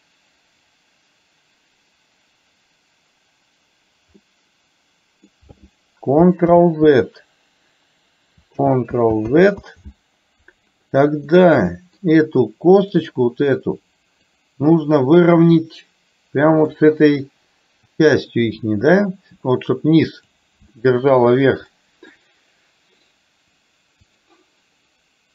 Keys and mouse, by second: 4.2-5.3 middle drag, 6.6 ctrl+z, 9.5 ctrl+z, 11.5 middle click, 13.1 click, 14.3-15.5 drag, 15.6-16.7 middle drag, 18.0-20.3 drag, 20.8 shift+middle click, 21.8 middle click, 24.1-25.3 drag.